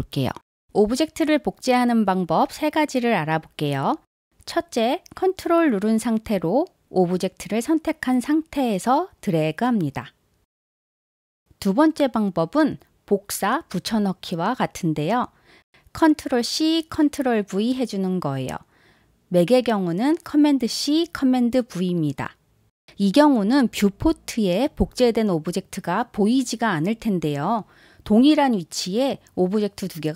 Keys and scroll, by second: 11.5 super+z, 12.0 super+z, 16.9 super+c, 18.3 super+v.